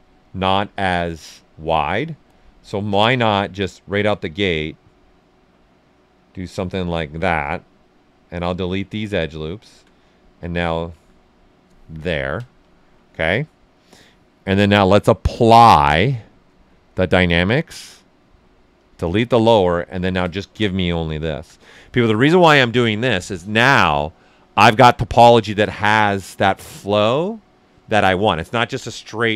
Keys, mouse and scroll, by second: 0.3 click, 1.1 space, 3.5-12.0 drag, 12.0 ctrl+right click, 13.0-14.6 right drag, 14.6-16.1 drag, 16.6 click, 19.3 ctrl+right click, 19.9 ctrl+shift+click, 20.4 ctrl+right click, 21.2 shift+f.